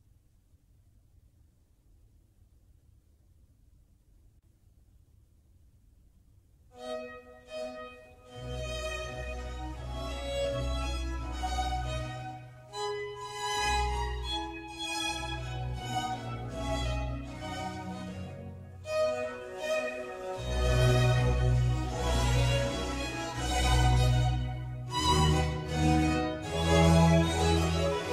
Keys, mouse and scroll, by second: 0.0-1.6 middle drag, 1.6 click, 2.1-3.6 middle drag, 3.6 g, 8.1-10.7 middle drag, 10.7 g, 13.6-15.0 middle drag, 15.0 ctrl+r, 19.2 click, 20.1 ctrl+r, 24.5 click, 24.9-28.1 middle drag.